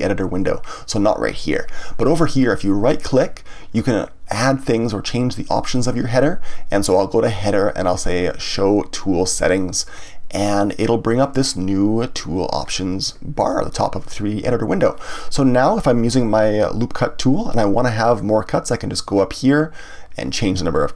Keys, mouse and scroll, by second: 2.9-5.9 right drag, 18.9-20.9 drag.